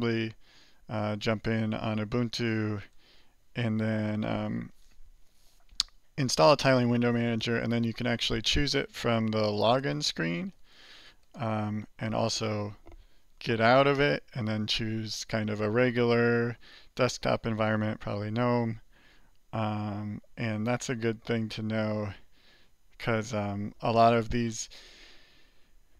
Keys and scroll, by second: 2.8 alt+Return.